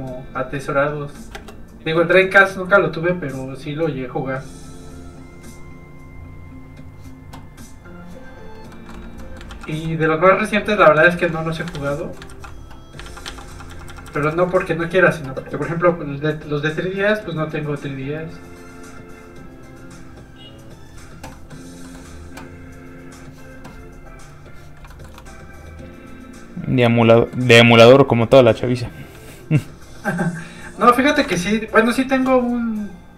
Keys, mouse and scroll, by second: 0.2 click, 1.3 space, 2.7 click, 8.2-8.7 scroll down 1, 8.7 middle click, 9.5 ctrl+z, 9.8 middle click, 10.2-11.0 scroll up 1, 11.1 ctrl+z, 11.3 middle click, 11.7 ctrl+z, 12.0-12.3 scroll up 2, 12.1 middle click, 12.3 ctrl+z, 13.0 ctrl+z, 14.7-15.6 scroll up 2, 15.6 click, 21.3 middle click, 21.5-21.8 scroll up 1, 21.8 middle click, 22.9 click, 24.9 shift+middle click, 25.5 middle click, 25.6 click, 27.1 middle click, 27.7 shift+middle click, 31.2 click, 31.3 shift+space, 32.1 shift+click.